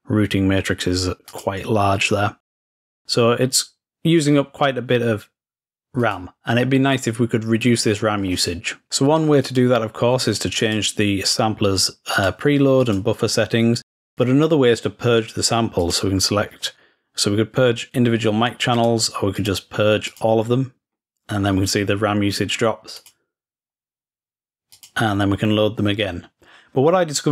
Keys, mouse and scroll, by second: 1.4 click, 2.8 click, 6.1 click, 9.5 click, 10.7 click, 12.2 click, 12.9 click, 14.0 click, 15.9 click, 18.8 click, 19.5 click, 20.2 click, 23.0 click, 24.8 click.